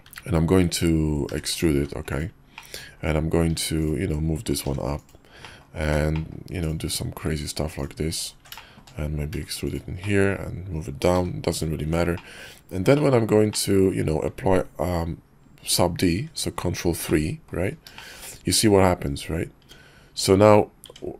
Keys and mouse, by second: 0.0 `, 1.3 e, 1.7 e, 2.6 click, 3.4 Tab, 3.8 click, 4.6 g, 5.4 click, 5.8 Tab, 6.1 drag, 6.6-7.3 drag, 7.3 Tab, 8.2 ctrl+click, 8.5 shift+click, 9.3 e, 10.0 click, 11.1 g, 11.8 Tab, 12.1 drag, 12.9 drag, 13.5 click, 16.3 ctrl+3, 17.1-17.5 drag, 17.9 shift+middle drag, 19.6 Tab, 20.1 Tab, 20.8 Tab.